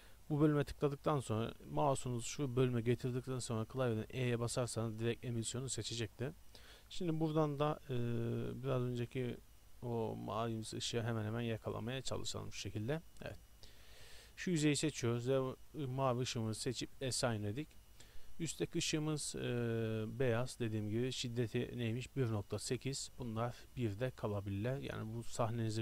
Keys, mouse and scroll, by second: 14.1 click, 14.7-15.7 drag, 15.7 middle click, 15.8-18.5 drag, 15.8-17.1 right drag, 18.5 middle click, 19.4 click, 20.1 click, 22.5 middle click, 22.9 click.